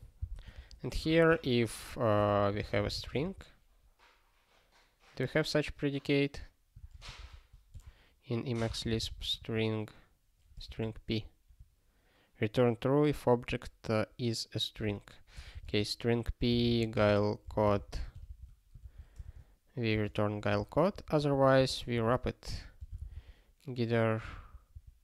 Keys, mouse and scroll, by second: 0.2 ctrl+b, 0.5 (, 0.9 i, 1.3 space, 2.3 (, 3.0 n, 14.7 ctrl+g, 15.3-17.7 typing, 18.8 ctrl+f, 19.2 alt+s, 19.9 space, 20.6 alt+f, 21.2 alt+f, 21.5 space, 21.9 (, 22.8 g.